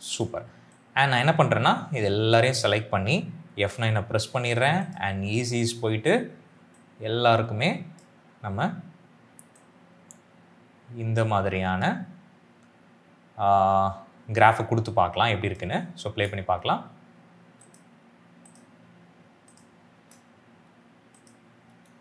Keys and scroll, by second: 3.5 F9, 16.0 space, 19.9 space.